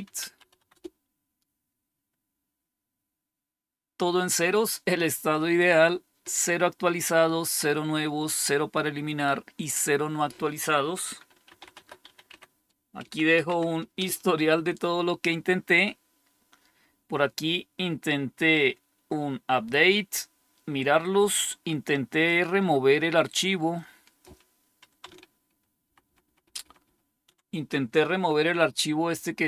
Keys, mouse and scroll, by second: 0.0-1.0 typing, 11.1-13.3 typing, 13.4 Tab, 13.9 Return, 25.4 ctrl++, 25.8 ctrl++, 26.0 ctrl++, 26.2 ctrl++, 26.3 ctrl++, 26.5 ctrl++, 26.7 ctrl++.